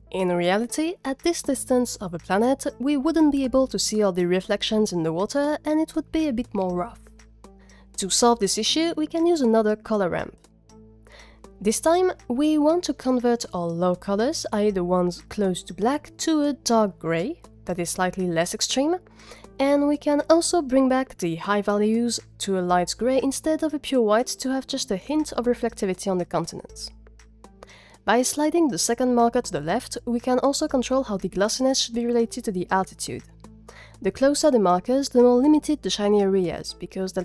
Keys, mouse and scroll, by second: 8.2 g, 8.9 click, 9.4 shift+a, 11.0 g, 15.4 click, 21.3 click, 22.3-24.0 drag, 29.8-31.6 drag.